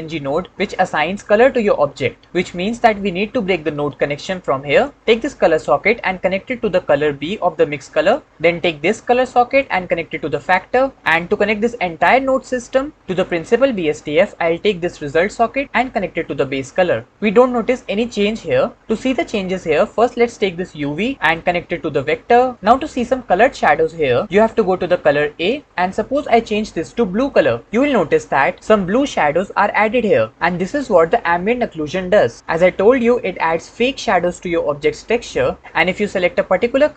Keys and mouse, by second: 4.2 ctrl+click, 5.7-8.3 drag, 9.5 click, 9.8-10.7 drag, 15.7-17.0 drag, 21.2 click, 21.5-22.5 drag, 25.2 click.